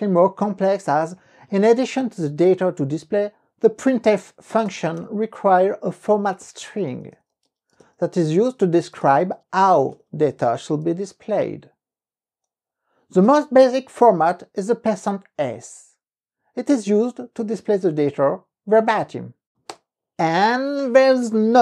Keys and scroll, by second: 1.7 Up, 1.9 Left, 4.4 Left, 4.7-5.6 typing, 6.8-9.4 typing, 10.5 n, 11.0 ,, 19.9 KP_Enter.